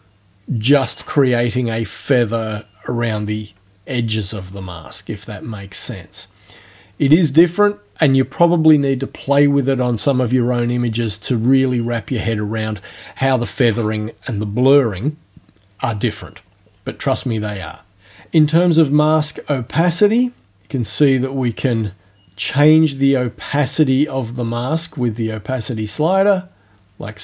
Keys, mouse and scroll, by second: 17.7 click, 19.8-27.2 drag.